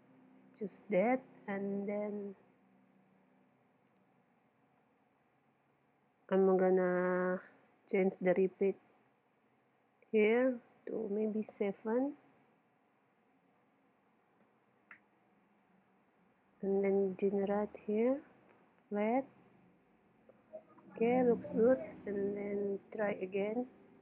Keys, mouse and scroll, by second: 2.2-4.0 drag, 8.4-10.1 drag, 13.4-15.2 drag, 16.3-18.0 drag, 18.6-21.8 drag, 22.7-24.0 drag.